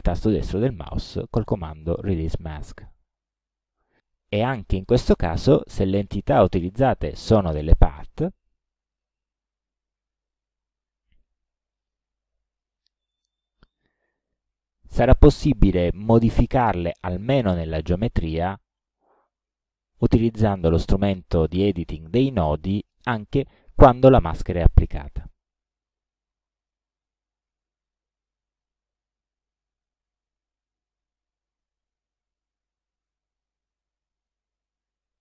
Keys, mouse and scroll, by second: 2.8 click, 4.6 click, 5.2 click, 8.9 click, 10.2 click, 11.8 shift+click, 12.6 shift+right click, 12.7 shift+click, 18.4 click, 20.0 click, 25.7 click, 26.8 shift+click, 27.4-28.8 shift+drag, 32.6-34.4 ctrl+drag.